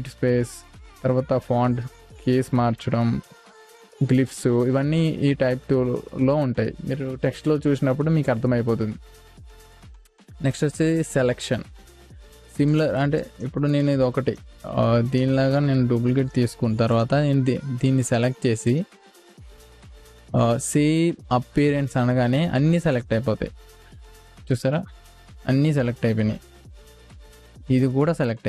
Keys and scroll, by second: 26.5 space.